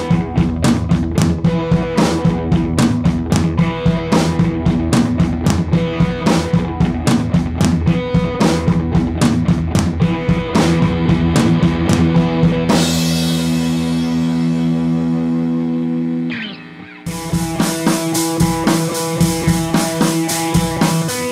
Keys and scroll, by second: 10.9 super+c, 11.1 super+d.